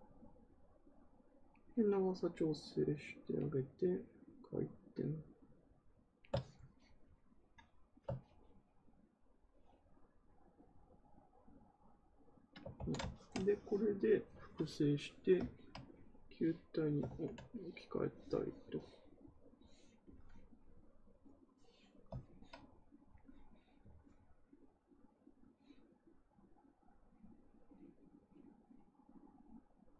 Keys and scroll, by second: 12.7 ctrl+z, 17.0 ctrl+z.